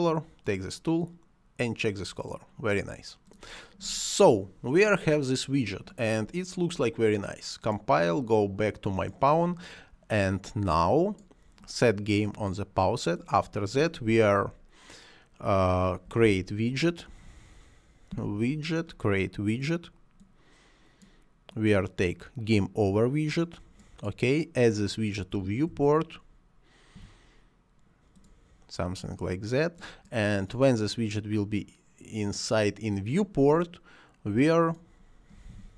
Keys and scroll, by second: 16.1 w, 16.3 o, 16.4 i, 17.1 BackSpace, 18.1 d, 25.3 v, 25.8 i, 27.0 e, 35.4 r, 35.6 e.